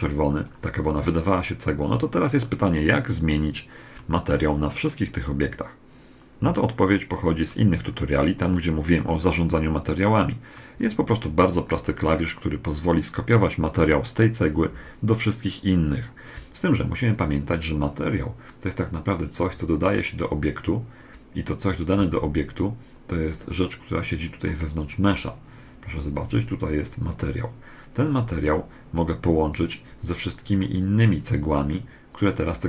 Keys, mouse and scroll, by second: 2.2-4.1 middle drag, 6.5-10.7 middle drag, 19.2 click, 23.9 click, 24.4-26.6 middle drag, 25.9 click, 30.1 click, 30.7-32.5 middle drag.